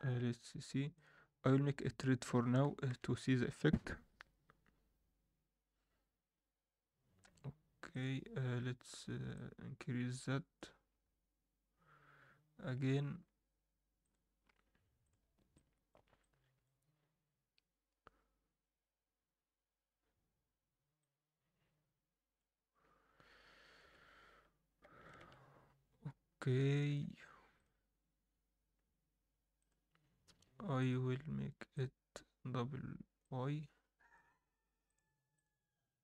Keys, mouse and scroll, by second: 0.9-2.0 drag, 2.8 KP_0, 4.7 click, 9.3-12.3 drag, 14.0-15.9 drag, 21.0-23.8 drag, 23.8 KP_0, 25.0 shift+right click, 26.3-26.7 scroll down 2, 26.7 shift+middle drag, 27.1 scroll up 1, 27.5-29.9 drag, 32.0-36.0 drag.